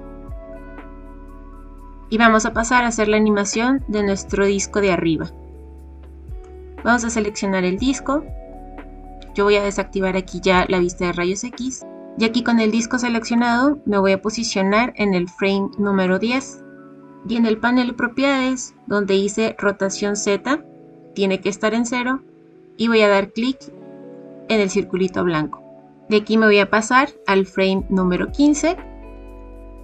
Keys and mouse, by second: 1.8-3.9 middle drag, 10.6 click, 13.3-16.0 drag, 23.6 click, 26.1-28.1 drag.